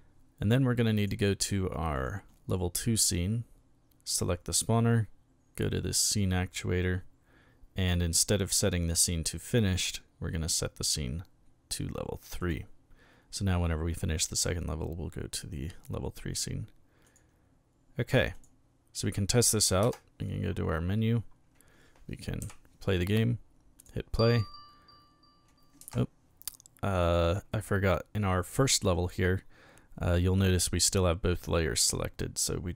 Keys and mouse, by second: 1.0 click, 1.9 click, 6.0 click, 9.1 click, 10.5 click, 12.4 click, 17.0 click, 18.3 click, 22.4 p, 23.8 click, 25.8 Escape, 27.2 click, 28.5 click.